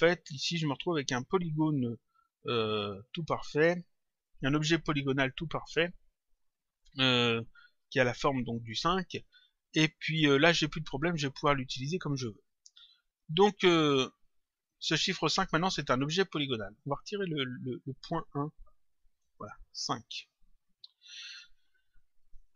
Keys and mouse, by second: 2.8 click, 4.2 click, 13.1 click, 16.6 click, 18.8 BackSpace, 19.8 click, 22.3 click.